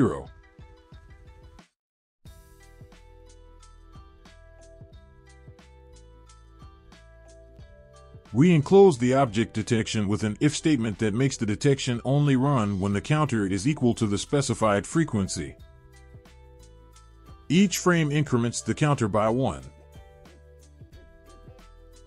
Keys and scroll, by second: 2.7 ctrl+v, 10.4 ctrl+v, 13.5 Tab, 14.9 ctrl+alt+0, 15.8 Tab, 17.5 Tab.